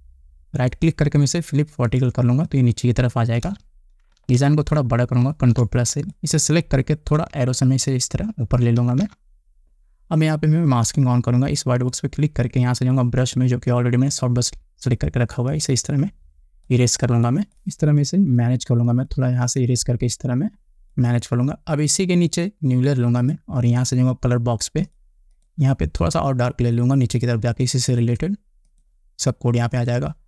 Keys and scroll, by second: 4.1 Return, 5.7 ctrl+=, 8.0 Up.